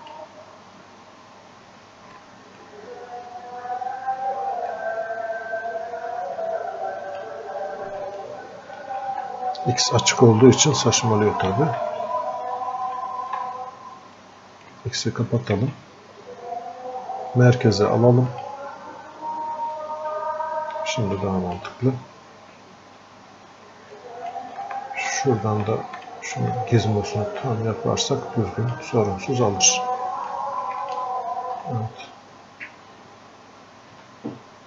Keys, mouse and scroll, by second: 5.0-20.1 drag, 20.1-25.0 drag, 25.0-34.6 alt+drag.